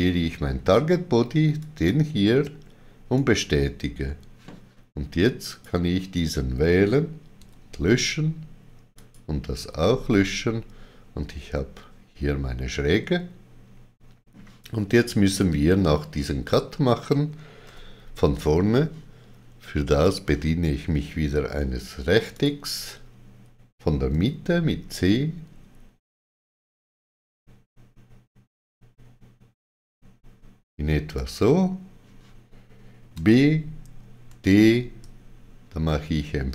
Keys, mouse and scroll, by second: 1.5 click, 1.5 c, 3.1 right click, 5.4 click, 7.3 x, 8.9 click, 9.5 x, 10.1 middle click, 20.0 click, 22.3 click, 24.1 c, 31.1 click, 33.1 b.